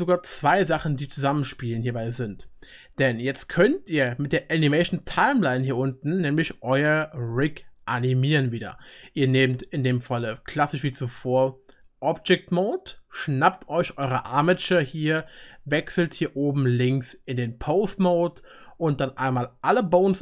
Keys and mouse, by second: 5.8 middle click, 5.9-13.5 drag, 13.5-16.9 middle drag, 16.8-20.2 drag.